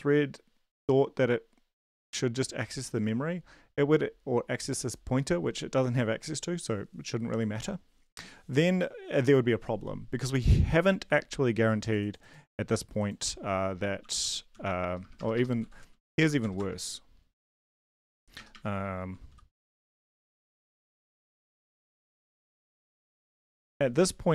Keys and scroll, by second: 14.0 shift+Home, 14.5 ctrl+x, 14.8 BackSpace, 15.0 BackSpace, 15.6 Down, 15.9 Down, 16.2 End, 16.4 Return, 16.6 Return, 17.4 BackSpace, 17.6 BackSpace, 17.8 BackSpace, 20.5 shift+0, 21.3 ;, 22.0 Return, 22.1 Return, 22.4 Up, 22.8 Tab, 23.0 Return, 23.3 ctrl+v.